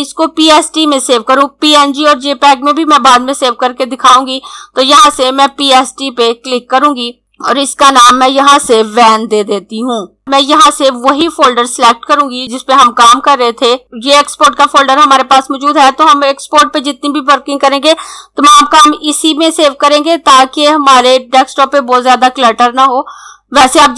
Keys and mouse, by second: 4.7 click, 7.5 click, 9.9 v, 11.2 click.